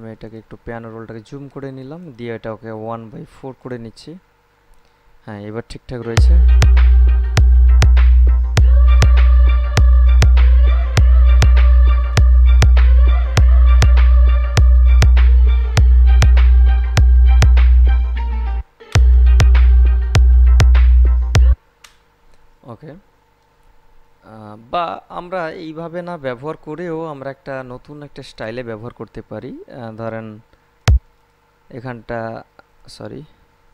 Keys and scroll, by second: 6.2 space, 18.8 space, 21.7 space.